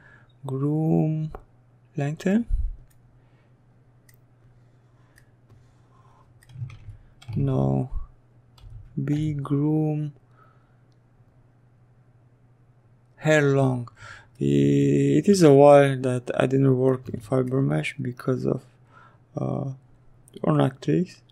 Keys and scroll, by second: 4.4 ctrl+z, 6.3 b, 6.9 g.